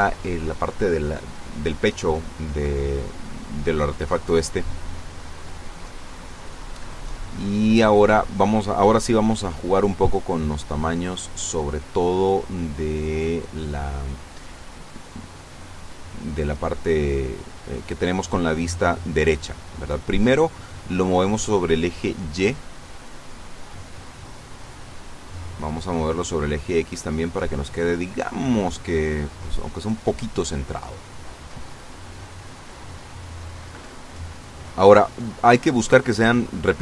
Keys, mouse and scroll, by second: 5.7 n, 7.3-7.7 scroll down 2, 12.2-16.0 drag, 16.7-18.0 drag, 19.6 click, 24.8 click, 25.9 click, 26.3 click, 29.0 click, 36.6 click.